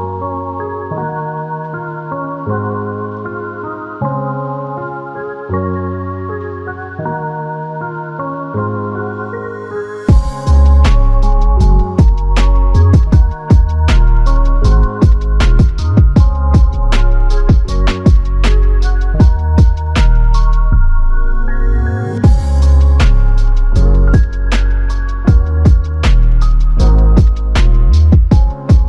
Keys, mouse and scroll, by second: 2.6 typing, 10.5 alt+click, 14.2 f, 15.3 alt+shift+click, 16.0 alt+click, 19.0 double click, 23.1 alt+click, 24.8 double click, 25.9 alt+click, 27.7 alt+shift+click, 28.2 alt+click.